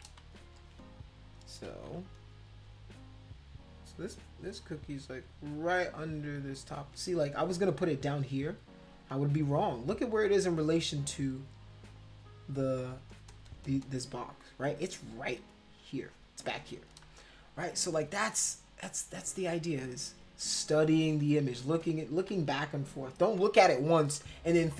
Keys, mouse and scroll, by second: 0.2 ctrl+z, 0.5 ctrl+z, 1.7 ctrl+z, 3.9 click, 4.4 click, 4.6 click, 6.3 click, 8.1 click, 10.3 click, 10.4-12.1 drag, 12.3 click, 12.5 click, 12.7 click, 12.9 click, 13.1 click, 13.3 click, 13.4 click, 13.6 click, 13.8 click, 15.1-16.2 drag, 16.5 click, 17.1 ctrl+z, 17.3 ctrl+z, 18.1 ctrl+z, 18.7 ctrl+z, 19.4 ctrl+z, 21.2 ctrl+z, 21.8 click, 22.3 ctrl+z, 23.4 ctrl+z.